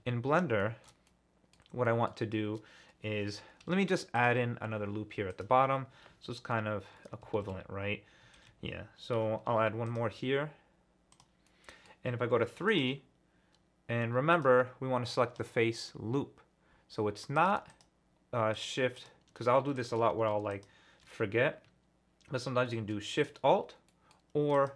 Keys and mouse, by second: 0.7 shift+middle click, 1.0 middle click, 1.5 click, 3.6 ctrl+r, 5.3 click, 9.4 ctrl+r, 11.1 click, 11.4 click, 12.2 3, 14.3 ctrl+alt+click, 17.4 click, 17.7 shift+click, 18.5 click, 19.0 alt+shift+click, 19.7 click, 20.5 alt+shift+click, 23.9 click, 24.5 click.